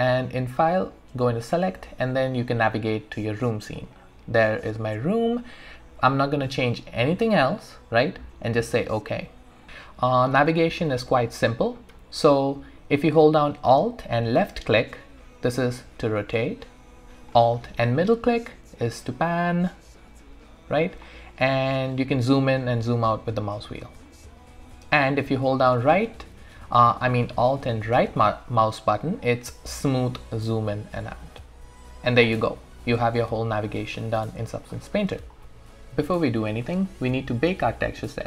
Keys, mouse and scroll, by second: 0.6 click, 2.9-3.8 scroll down 1, 3.8 click, 8.5 click, 10.9-14.2 alt+middle drag, 14.2-17.9 alt+drag, 17.9-21.0 alt+middle drag, 22.1-22.5 scroll up 1, 22.5-22.9 scroll down 1, 23.1-23.6 scroll up 1, 23.6-24.0 scroll down 1, 24.1-27.6 alt+right drag, 28.8-32.3 alt+right drag, 32.6 alt+middle click, 32.7 alt+right click, 33.2 alt+middle click, 33.6-34.9 alt+drag, 34.9-35.4 scroll up 1, 35.4 scroll down 1.